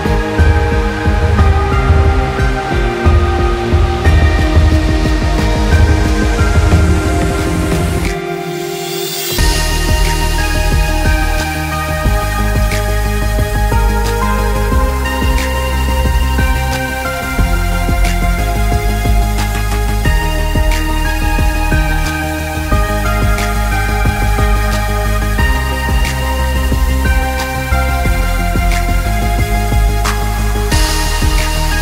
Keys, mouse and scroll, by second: 0.0-1.1 typing, 0.4 scroll down 1, 0.7 click, 1.2 scroll up 1, 1.4 click, 1.9 scroll, 6.9 scroll down 2, 6.9 click, 7.2 click, 9.5 click, 11.0 scroll up 1, 11.1 click, 11.5 click, 12.9 z, 13.0 click, 13.7 ctrl+z, 13.9-15.4 drag, 15.4 scroll down 1, 15.5-18.9 drag, 18.9 scroll up 1, 19.1-21.0 drag, 21.0 scroll up 1, 21.2 click, 21.7 scroll down 1, 21.9 scroll up 1, 22.0 click, 24.6 scroll up 1, 24.7 scroll down 1, 24.9 click, 26.1 scroll down 1, 26.2 click, 27.2 alt+scroll down 1, 27.4 scroll up 1, 27.6 click, 29.5 scroll up 1, 29.8 click, 30.4 click, 30.9 click.